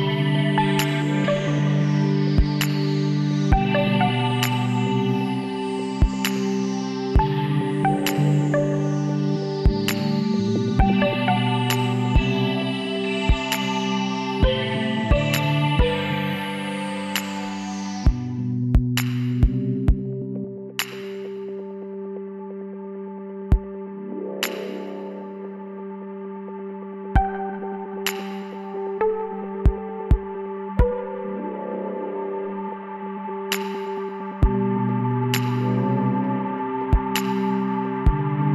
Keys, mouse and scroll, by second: 5.4-6.4 drag, 6.0 right click, 6.5 click, 6.5 right click, 6.6 click, 6.6 right click, 6.7-7.8 drag, 6.7 right click, 6.9 x, 12.1-13.1 drag, 12.6 right click, 13.2 click, 13.2 right click, 13.4 click, 13.4 right click, 13.5 l, 16.3 middle click, 17.1 KP_1, 20.5 KP_3, 21.5 KP_3, 21.9 KP_9, 23.9 s, 27.2-29.0 middle drag, 29.4-30.6 middle drag, 30.6-32.3 drag, 33.7-35.5 middle drag, 36.0-37.0 middle drag, 37.0 KP_1, 37.2 click.